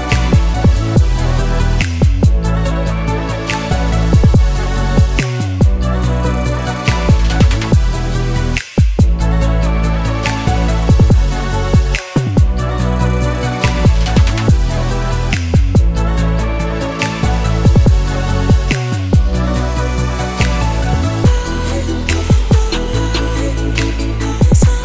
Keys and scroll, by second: 19.4-23.0 typing.